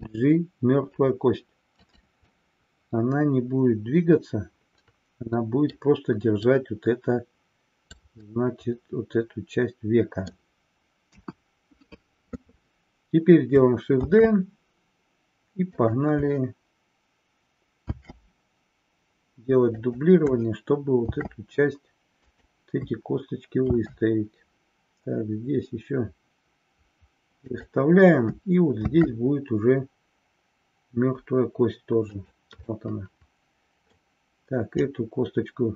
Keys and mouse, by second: 1.9 click, 2.5-5.7 middle drag, 6.6-8.1 drag, 8.5-10.5 middle drag, 11.2 KP_1, 14.1 shift+d, 15.9 click, 17.8 shift+d, 19.8 click, 21.1 shift+d, 27.6 click, 28.8 shift+d, 32.2 click, 32.8-34.1 middle drag, 34.9-35.7 drag.